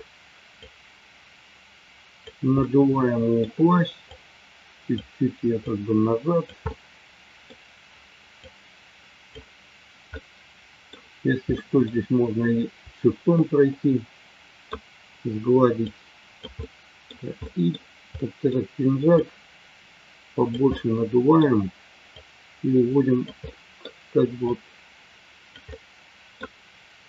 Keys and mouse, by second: 0.5-2.2 drag, 2.5 middle click, 4.1 click, 5.6 click, 6.6 middle click, 8.5 click, 10.1-11.8 middle drag, 13.2-14.6 middle drag, 15.9 click, 16.6 middle click, 17.4-18.7 middle drag, 19.3-20.5 drag, 20.7 middle click, 22.1-23.2 drag, 23.4 middle click, 25.4 click, 25.8 middle click.